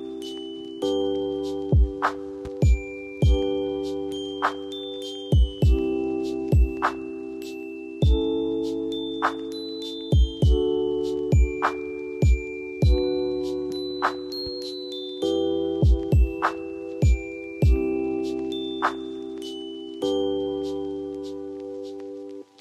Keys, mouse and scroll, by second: 15.4 alt+scroll, 15.4-16.0 alt+scroll up 6, 16.0-16.5 alt+scroll down 2.